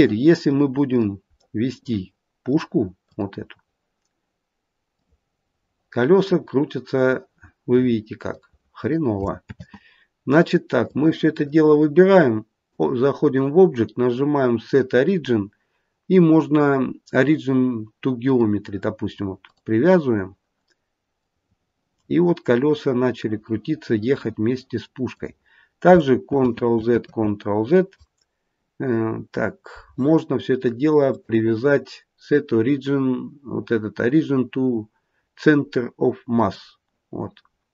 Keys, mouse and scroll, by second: 0.0 middle click, 0.8 click, 1.3 middle click, 1.6 middle click, 3.0 click, 4.8 click, 9.4 ctrl+z, 10.8 click, 12.6 click, 19.3 click, 21.1 click, 26.2 ctrl+z, 26.9 ctrl+z, 31.0 click.